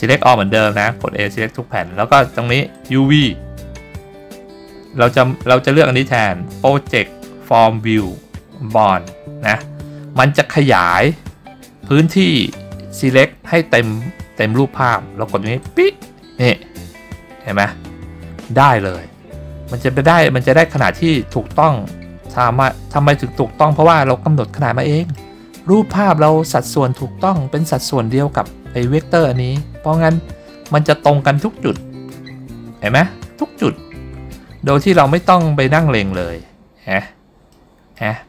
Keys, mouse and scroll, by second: 0.6 a, 2.8-15.9 drag, 21.5 ctrl+scroll up 2, 22.1-23.0 scroll up 4, 24.2-25.4 middle drag, 27.1 ctrl+scroll down 2, 27.9 scroll down 2, 29.9 ctrl+scroll down 2, 30.4-31.5 ctrl+scroll up 4, 31.9 middle click, 32.2-32.7 scroll up 3, 33.7-35.0 ctrl+scroll down 8, 35.3 middle click, 36.3 scroll up 1, 36.9-37.3 scroll up 3, 37.6 middle click.